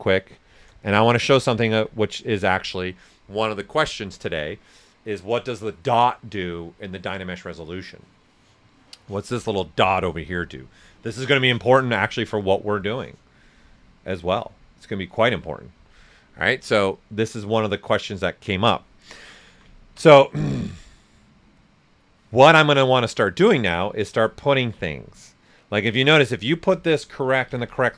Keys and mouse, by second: 1.0 alt+right click, 1.7 ctrl+s, 1.8-4.6 ctrl+drag, 19.2 ctrl+alt+right click, 19.7 ctrl+alt+right click, 20.0 ctrl+alt+right click, 27.1-27.9 typing.